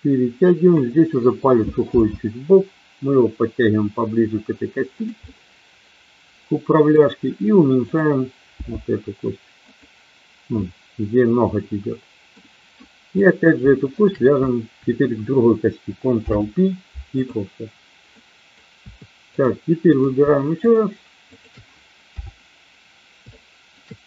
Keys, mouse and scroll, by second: 2.0 g, 5.2-7.0 middle drag, 7.7 click, 8.5 g, 9.6 click, 10.6-12.2 middle drag, 13.1 click, 14.0 shift+click, 16.1 ctrl+p, 18.1 middle click, 19.3 click, 20.0 click, 20.6 shift+click, 21.3 shift+click, 22.0 KP_7, 23.3 shift+middle click.